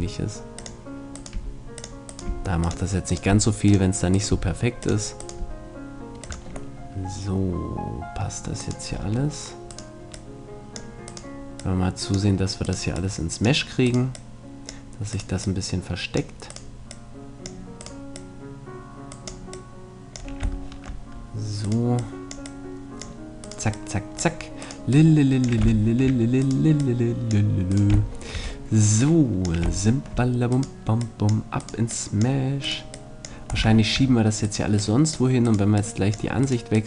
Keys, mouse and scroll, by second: 1.3 g, 2.2 g, 3.3 g, 4.3 g, 6.2 g, 6.8 middle click, 7.6 click, 8.6-13.4 right drag, 10.1-13.4 drag, 20.2-21.3 drag, 20.6-22.4 middle drag, 22.0-24.2 drag, 22.0-24.2 right drag, 25.8 middle click, 26.8-28.6 middle drag, 33.7-35.8 middle drag, 36.0-36.8 drag, 36.0-36.8 right drag.